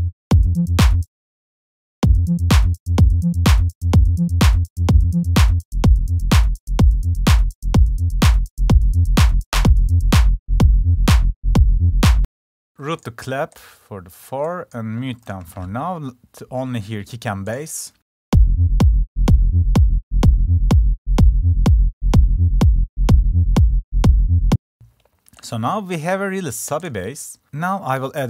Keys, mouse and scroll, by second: 10.0-11.4 drag, 11.4 click, 23.8 click, 24.4 F1, 25.6 F1, 27.2 click.